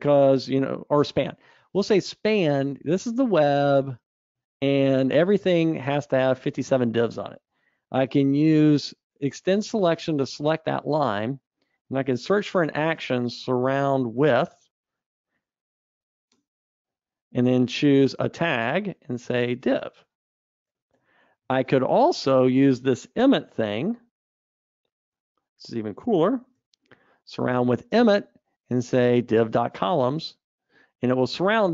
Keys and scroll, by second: 9.7 alt+Up, 19.2 alt+super+t, 21.1 Escape, 21.5 super+z, 24.4 alt+Up.